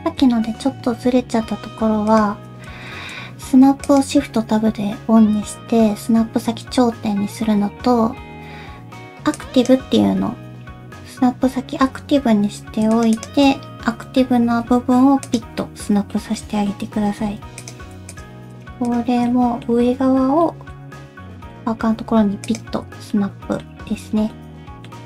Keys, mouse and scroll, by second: 2.1 click, 2.9 shift+Tab, 3.9 click, 12.9 shift+click, 13.2 shift+click, 14.5 g, 15.6 middle click, 16.4 middle click, 17.1 alt+z, 17.6 click, 18.1 shift+click, 18.5 shift+click, 18.9 shift+click, 19.3 alt+z, 19.3 middle click, 20.4 middle click, 21.1 alt+z, 21.4 middle click, 22.0 g, 23.0 alt+z, 23.1 middle click, 23.9 alt+z, 24.1 scroll down 2, 24.3 middle click.